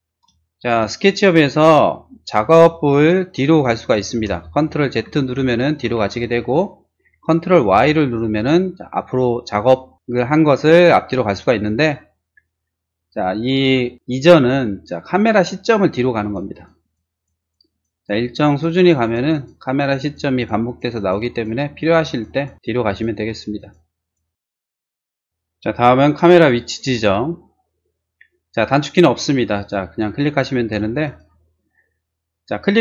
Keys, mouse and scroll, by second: 0.4 shift+middle click, 0.9 shift+r, 1.1 click, 2.2 click, 3.1 p, 3.3 click, 3.8 click, 4.1 space, 5.1 ctrl+z, 7.7 ctrl+y, 16.2 click, 16.5 click, 16.8 click, 17.1 click, 17.4 click, 17.7 click, 18.0 click, 18.2 click, 18.5 click, 18.7 click, 19.0 click, 19.3 click, 19.7 click, 20.0 click, 20.3 click, 20.7 click, 21.0 click, 21.3 click, 21.8 click, 22.1 click, 22.3 click, 22.7 click, 23.1 click, 23.5 click, 23.8 click, 24.2 click, 24.5 click, 25.0 click, 31.1 click.